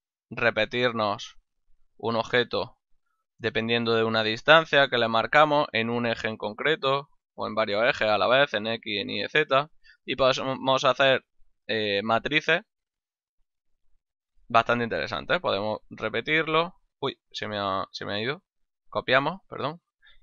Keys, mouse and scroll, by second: 1.0 click, 1.8 ctrl+middle click, 2.6 shift+middle click, 4.6 click, 5.8 click, 7.9 ctrl+middle click, 9.9 ctrl+middle click, 10.4 shift+middle click, 11.1 ctrl+middle click, 13.6 click, 14.2 middle click, 15.3 click, 17.2 ctrl+z, 18.7 click.